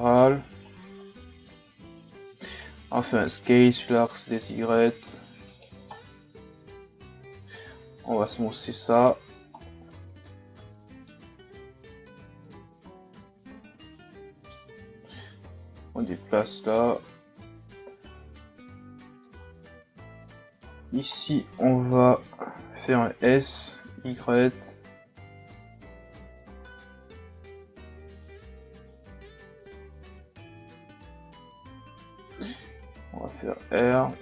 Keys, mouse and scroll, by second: 0.2-1.0 ctrl+scroll down 12, 1.0-1.5 scroll up 1, 1.5 s, 2.9 s, 6.0-6.4 scroll down 4, 6.4 Tab, 7.8 w, 9.2 a, 9.5-10.3 scroll down 5, 10.3-10.8 scroll up 6, 11.0 right click, 11.4 scroll up 2, 11.7 Tab, 13.4-13.9 scroll down 2, 13.9 middle click, 14.7-15.2 scroll down 4, 15.6 click, 17.0 ctrl+z, 17.7-19.8 drag, 19.8 KP_3, 20.6-21.1 shift+scroll up 4, 21.1 ctrl+scroll down 3, 21.4-21.9 scroll up 4, 21.9-22.7 ctrl+scroll down 6, 22.7-23.5 scroll up 4, 23.5 s, 26.6 r, 28.9-31.9 drag, 32.5 r, 34.1 Tab.